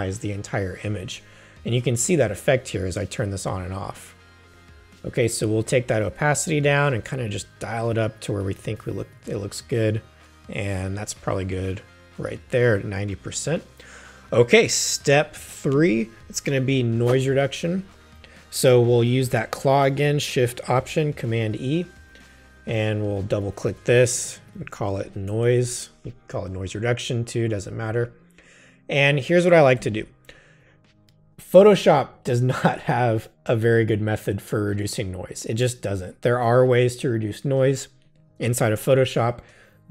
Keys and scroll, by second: 21.2 alt+shift+super+e, 24.3-25.6 typing, 29.8 v.